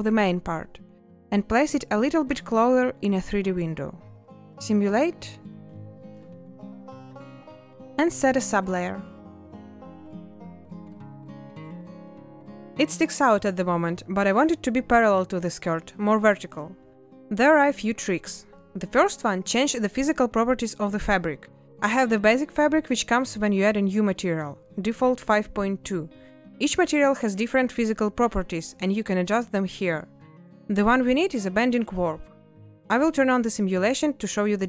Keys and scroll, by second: 0.9 a, 8.4 space.